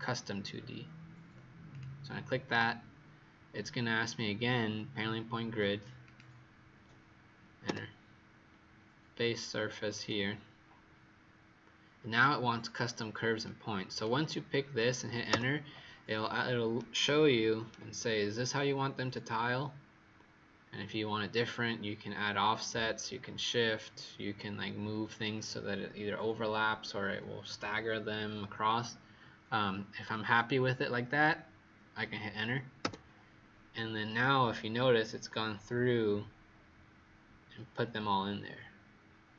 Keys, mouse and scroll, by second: 7.6 Return, 9.8 click, 15.2 Return, 16.7 right click, 18.3-19.2 scroll down 1, 19.2-23.3 scroll up 1, 32.7 Return, 34.1 right click.